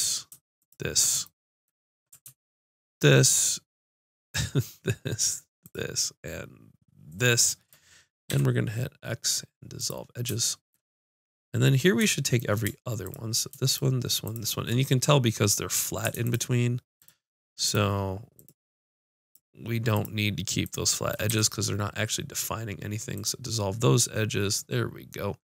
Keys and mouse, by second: 2.9-9.8 drag, 8.3 x, 13.0-22.7 drag, 21.3 x, 24.0 click.